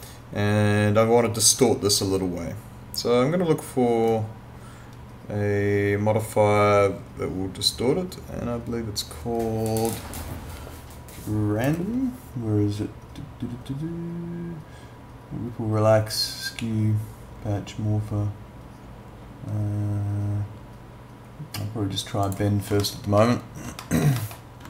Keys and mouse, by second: 4.1 click, 22.2 click, 22.8 alt+middle click, 23.8 alt+middle click.